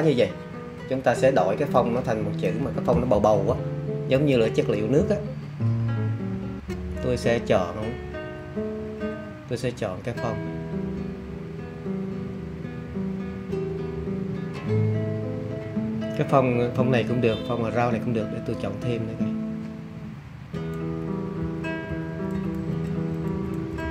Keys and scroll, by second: 21.3 alt+Down, 22.0 Down, 22.5 Page_Down, 23.2 Down, 23.7 Down.